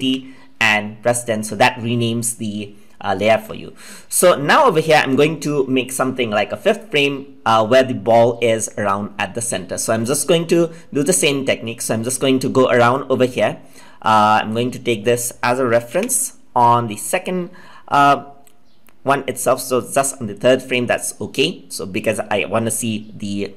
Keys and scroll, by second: 15.8 ctrl+z.